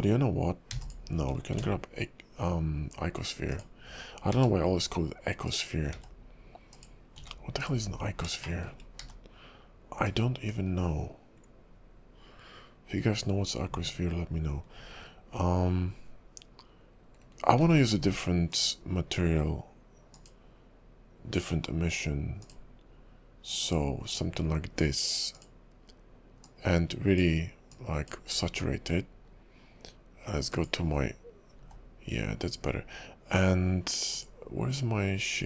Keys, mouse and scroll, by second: 0.7 x, 1.5 shift+a, 4.3 s, 5.9 s, 7.2 g, 7.8-8.3 scroll up 3, 8.4 shift+middle click, 10.5-11.0 scroll down 2, 10.5 s, 17.6 alt+m, 20.1 click, 23.6 click, 25.3 click, 30.7 click, 31.6 s.